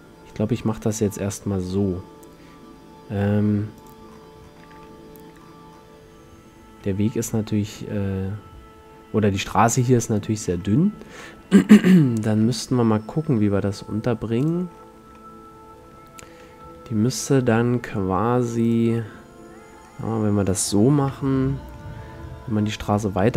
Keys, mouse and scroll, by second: 0.0 g, 4.0-5.0 drag, 5.0-5.9 middle drag, 5.9-7.3 middle drag, 7.2 g, 10.6-14.5 middle drag, 13.5 g, 14.7-15.3 drag, 15.3-17.2 middle drag, 16.8 g, 18.9-19.3 drag, 19.4 click, 19.5 middle click, 21.1 KP_5.